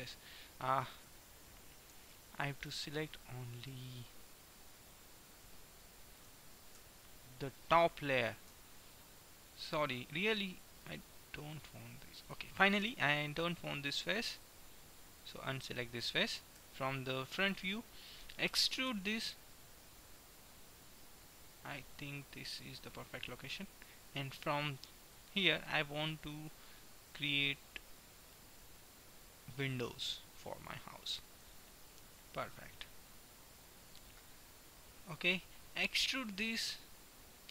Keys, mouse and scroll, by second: 1.3 KP_1, 1.6-4.3 middle drag, 4.9-6.6 middle drag, 6.8 a, 8.6-10.9 middle drag, 8.6 b, 14.4-16.4 drag, 15.4-17.3 right drag, 16.6 KP_1, 17.3 middle click, 18.9 e, 19.8-20.8 middle drag, 22.8-24.8 middle drag, 26.6-28.4 right drag, 28.4 middle click, 29.9-32.9 right drag, 32.3 KP_1, 33.3-34.9 right drag, 34.8 KP_1, 36.3 e.